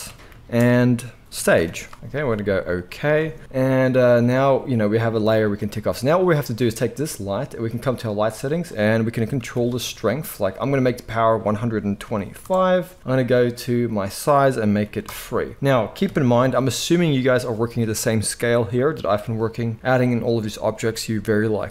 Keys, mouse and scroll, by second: 5.2 middle click, 5.4 click, 5.5 middle click, 6.2 click, 6.2-7.5 middle drag, 7.5 click, 7.7 middle click, 8.5-21.7 drag, 16.0 KP_1.